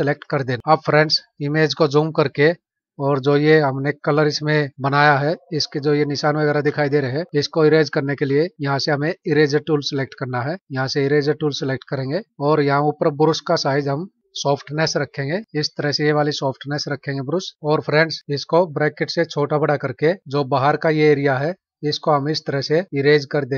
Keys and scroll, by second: 0.6 ctrl+=, 1.3 space, 17.5 F9.